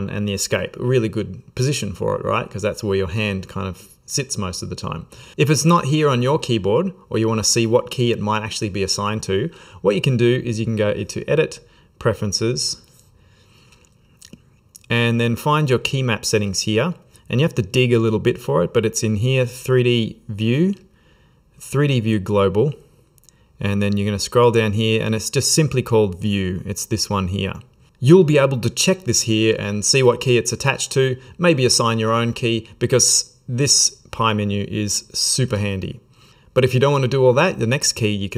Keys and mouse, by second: 10.6 click.